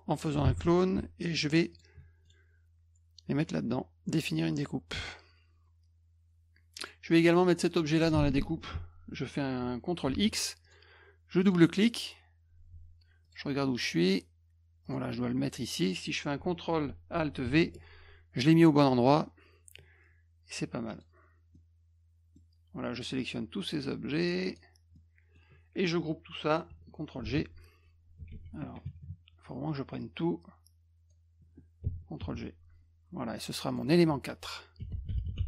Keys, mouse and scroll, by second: 0.4 alt+d, 1.7 shift+click, 2.2 right click, 4.5 click, 5.0 click, 6.8 click, 7.4 click, 10.1 ctrl+x, 10.6 click, 11.4 click, 11.9 click, 13.2 click, 14.8 click, 17.4 ctrl+alt+v, 20.9 click, 21.5 middle click, 23.2-24.5 drag, 24.9 middle click, 27.2 ctrl+g, 28.4 z, 30.0-31.1 drag, 33.7 click, 33.8 click, 34.5-35.4 typing.